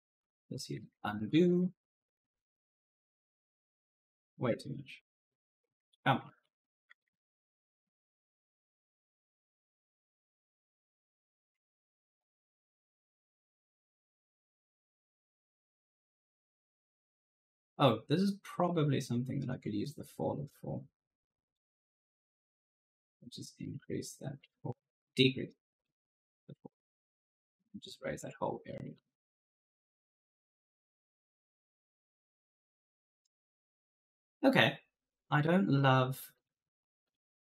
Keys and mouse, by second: 0.8 ctrl+z, 2.1 click, 3.4 right click, 3.7-4.4 typing, 4.6 ctrl+z, 6.5 ctrl+z, 8.4 ctrl+z, 9.7 click, 11.3 8, 11.5 0, 12.1 Return, 12.7 right click, 12.7-13.5 typing, 14.8 right click, 15.1 click, 16.5 click, 21.4 click, 24.7 right click, 27.9 click, 28.5-34.5 typing, 28.6 right click, 33.0 right click, 36.2 click.